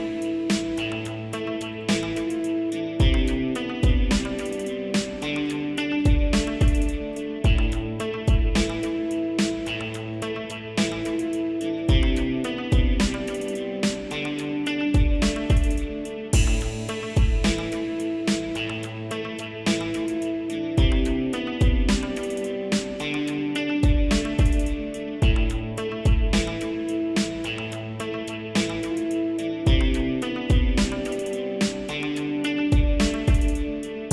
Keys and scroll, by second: 14.3 ctrl+s, 18.0 ctrl+s.